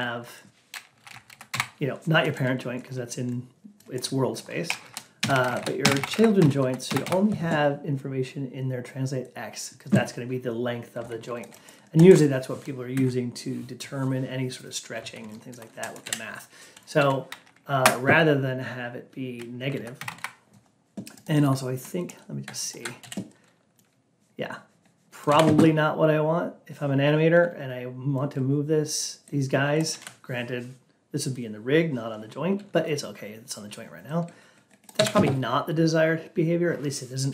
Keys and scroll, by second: 0.9 Down, 1.4 Up, 5.7 Up, 6.7 Up, 17.7 Down, 19.7 Down.